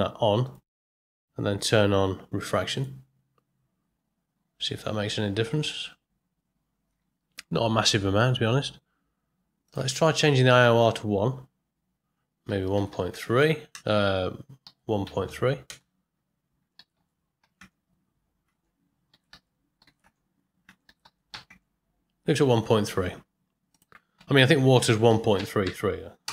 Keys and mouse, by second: 7.2 right click, 8.1 right click.